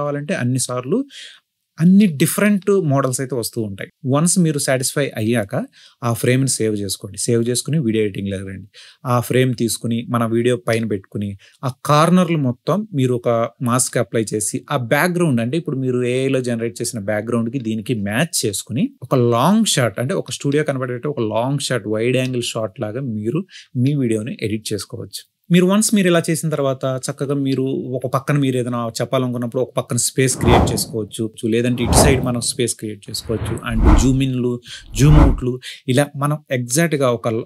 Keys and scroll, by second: 7.0 i, 15.5 5, 15.6 Return, 20.2 space, 24.2 space, 26.9-28.1 typing.